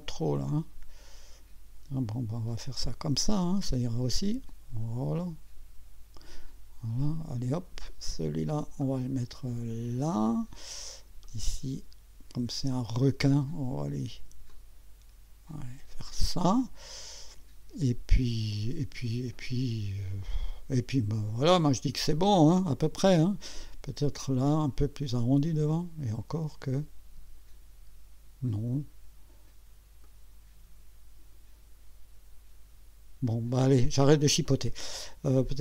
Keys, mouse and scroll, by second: 0.5-2.3 drag, 2.9-6.5 drag, 8.8-10.5 drag, 11.2-13.3 drag, 14.5-16.3 drag, 24.2-29.1 drag, 30.0-33.7 drag.